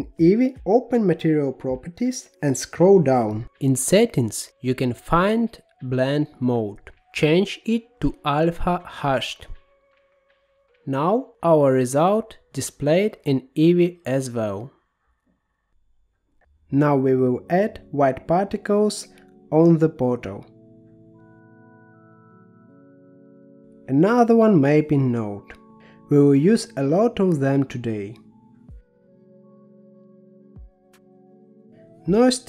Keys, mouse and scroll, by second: 2.4 click, 3.1-6.6 scroll down 21, 6.6-8.6 drag, 9.7-12.0 middle drag, 12.0 click, 14.7-15.9 scroll down 12, 15.9 middle click, 16.8-18.2 drag, 18.2 g, 20.4-21.6 middle drag, 21.6-22.4 scroll up 5, 22.4-23.9 scroll up 3, 23.9 click, 24.4 shift+d, 26.8-29.1 middle drag, 29.1-30.9 drag, 30.9-31.7 scroll up 7, 31.9 shift+a.